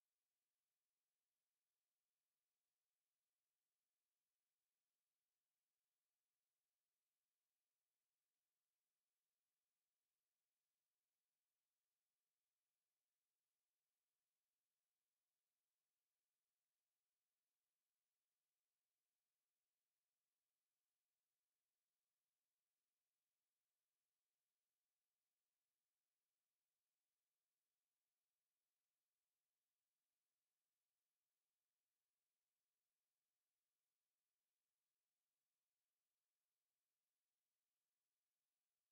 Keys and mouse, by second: 2.1 alt+click, 3.1 alt+right click, 3.7 alt+click, 5.0 click, 6.8 alt+click, 7.6 alt+right click, 27.1 alt+click, 29.3 alt+right click, 29.8 alt+click, 30.5 alt+click, 31.3 alt+right click, 31.7 alt+click, 33.2 alt+click, 33.6 alt+right click, 33.9 alt+click, 34.6 alt+middle click, 35.5 middle click.